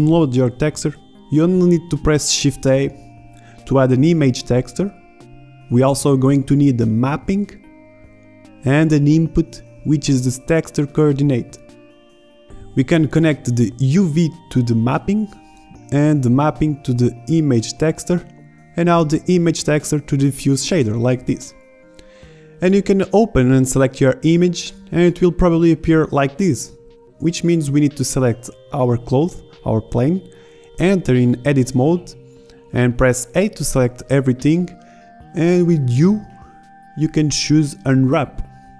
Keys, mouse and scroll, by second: 0.0 click, 0.1 shift+a, 5.7-6.2 drag, 6.2 shift+a, 8.3 click, 8.9 shift+a, 21.1-21.4 middle drag, 31.5 Tab, 32.6 a, 32.9 a, 36.6 u.